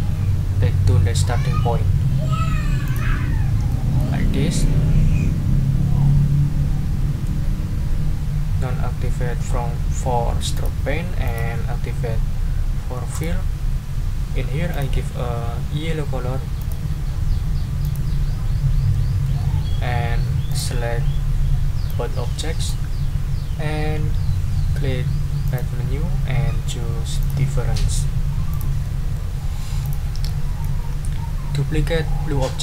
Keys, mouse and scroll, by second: 2.8 click, 3.7 click, 4.3 click, 10.5 click, 11.2 click, 13.1 click, 14.7 click, 16.6 click, 17.8 click, 18.9-19.4 scroll up 2, 20.5 ctrl+click, 20.9 ctrl+scroll down 2, 21.8-22.8 drag, 25.4 click, 27.2 click, 27.7 middle click, 28.5 click, 28.8 middle click, 29.8 ctrl+middle click, 30.3 ctrl+middle click, 30.9 ctrl+scroll up 2.